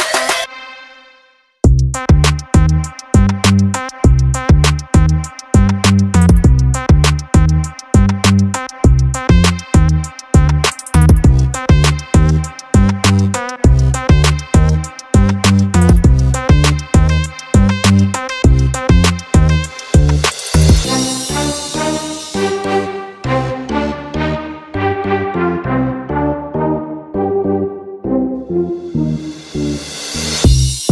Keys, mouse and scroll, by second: 1.9 click, 4.3 click, 4.8 click, 5.7 click, 7.1 click, 7.5 click, 8.1 click, 8.8 click, 9.2 drag, 9.5 click, 10.5 click, 12.7 click, 13.7 click, 15.0-16.9 drag, 17.3-18.4 drag, 18.6-20.3 drag, 20.7 click, 21.5-24.0 drag, 26.1 click, 27.0 click, 27.5 click, 30.8 click.